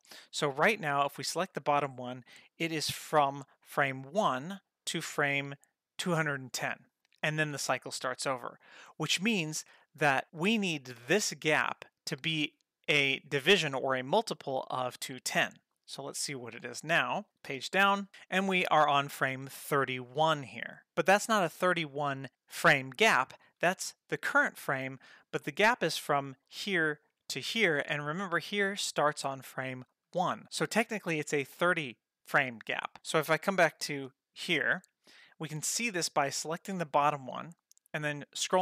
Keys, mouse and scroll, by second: 1.3 click, 3.3 click, 4.5-5.7 drag, 16.8 click, 17.5 Page_Down, 26.3 click, 27.2 click, 28.1 click, 29.8 click, 34.0 Page_Up, 36.4 click, 38.2-38.6 scroll down 4.